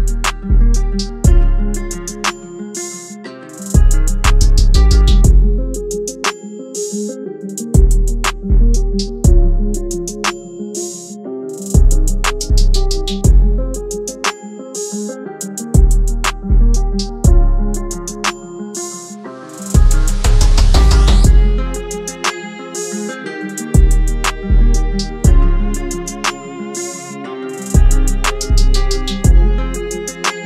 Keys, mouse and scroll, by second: 11.5-12.5 typing, 14.5 double click, 29.4-30.2 scroll down 1.